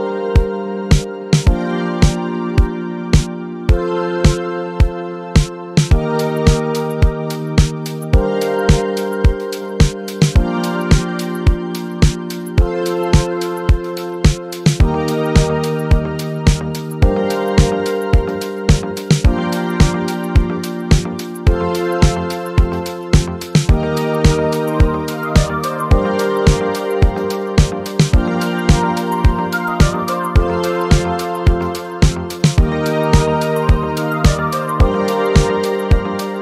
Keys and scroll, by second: 3.8 z, 5.6 Right, 14.0 ctrl+z, 21.2 ctrl+z, 22.8 Up, 30.0 ctrl+z, 32.2 space, 35.0 Delete.